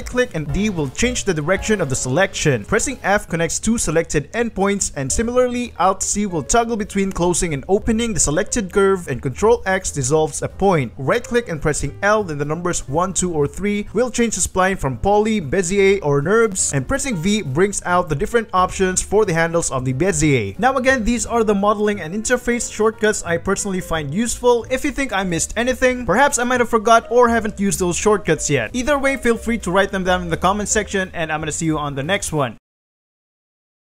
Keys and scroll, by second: 0.6 d, 2.9 shift+g, 3.5 f, 4.0 Escape, 4.0 ctrl+z, 4.4 f, 4.8 ctrl+z, 5.4-7.0 typing, 6.0 Tab, 8.3 alt+c, 9.2 alt+c, 9.4 alt+Tab, 10.0 ctrl+x, 10.6 ctrl+x, 11.7 Escape, 12.1 l, 19.3 Escape, 19.3-22.7 typing, 20.5 Tab, 23.1 ctrl+b, 23.8 Escape, 23.8 ctrl+z, 23.8-26.7 typing, 25.4 Tab, 28.1-31.3 typing, 29.5 Tab, 31.6 alt+d, 32.2 alt+d, 32.7 Tab.